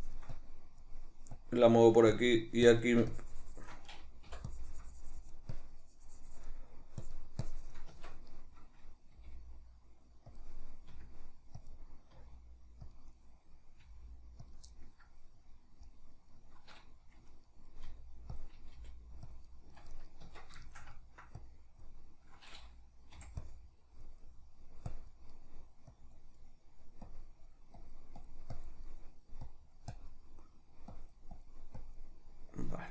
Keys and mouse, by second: 7.9 Tab, 8.3 right click, 9.2 g, 10.4 click, 10.9 r, 11.7 click, 12.1 r, 13.0 click, 13.8 g, 14.5 click, 14.7-18.4 middle drag, 17.8 r, 18.4 click, 18.8 g, 19.4 click, 19.5-20.0 middle drag, 20.0 right click, 20.2 Tab, 20.6 shift+middle click, 21.4-24.2 drag, 23.2 g, 24.2 middle click, 24.9 click, 25.4 middle click, 25.9 click, 26.4 middle click, 27.1-28.8 drag, 28.8 middle click, 29.5 click, 30.4 middle click, 30.9-32.3 drag, 32.3 middle click, 32.7-32.9 drag.